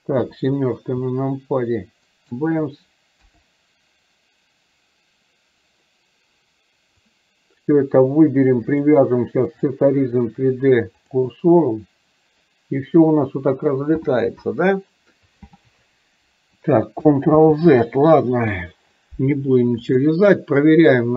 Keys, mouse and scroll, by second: 2.2 shift+right click, 7.1-7.8 drag, 8.8-11.2 drag, 20.1 click.